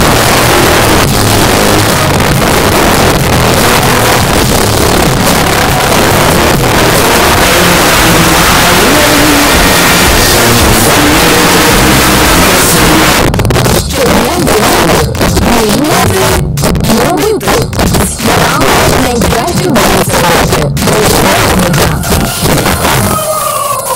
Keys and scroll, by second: 0.7 Down, 0.9 Down, 1.1 Down, 1.2 Down, 1.3 Down, 1.9 Down, 2.0 Down, 2.3 Down, 2.8 Down, 2.9 Down, 3.6 Down, 3.8 Return, 13.1 Page_Down.